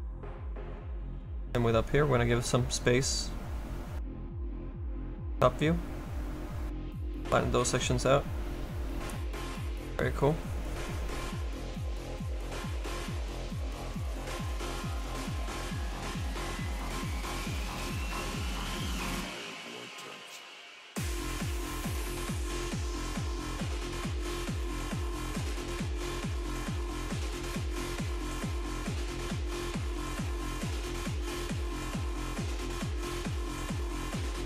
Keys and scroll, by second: 11.4 z.